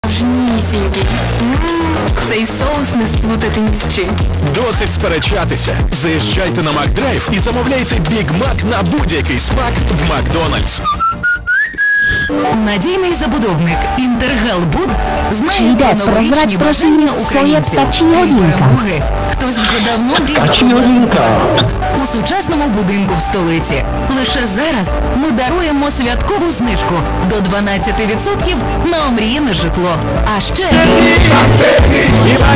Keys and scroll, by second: 0.1 ctrl+o, 2.9 e, 3.9 Down, 4.2 Down, 5.1 Down, 5.1 typing, 21.7 Page_Down.